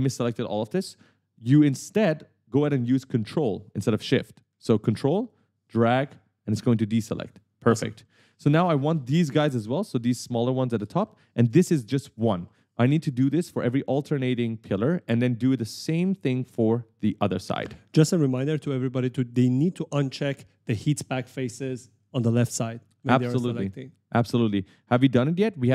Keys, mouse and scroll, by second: 0.0 right click, 5.4 ctrl+click, 7.3 right click, 8.1 w, 8.6 w, 9.8 shift+click, 11.1 right click, 11.3-13.2 typing, 14.7 right click, 14.8 d, 15.1 s, 16.8 right click, 16.8 a, 17.4 w, 17.9 w.